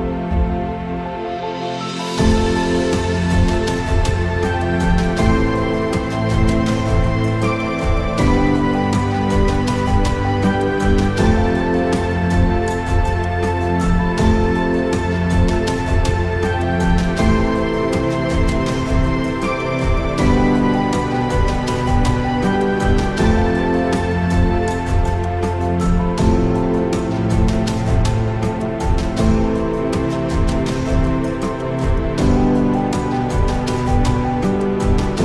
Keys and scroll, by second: 0.5 g, 0.6 x, 0.8 Tab, 1.1 KP_0, 1.7 Tab, 2.6 g, 2.8 shift+x, 3.0 Tab, 3.7 KP_0, 5.4 ctrl+], 6.2 ctrl+z, 10.3 ctrl+z, 10.4 ctrl+z, 11.6 ctrl+z, 11.8 ctrl+z, 12.0 ctrl+z, 12.4 ctrl+z, 12.5 ctrl+z, 15.2 ctrl+z, 16.0 ctrl+z, 16.1 ctrl+z, 16.2 ctrl+z, 18.7 Tab, 19.1 Tab, 19.8 shift+a, 22.2 s, 24.3 s, 25.9 r, 25.9 y, 26.5 Tab, 27.1 e, 28.2-29.7 typing, 31.5 g, 32.9 g, 33.1 x, 33.7 r, 34.3 y.